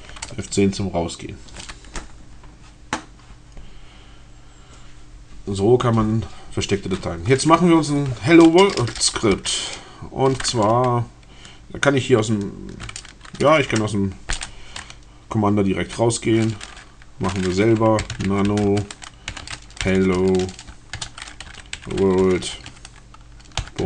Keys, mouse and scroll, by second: 4.1-4.7 scroll down 2, 4.8-5.3 scroll down 2, 8.3 BackSpace, 13.8 F10, 17.7-23.8 typing.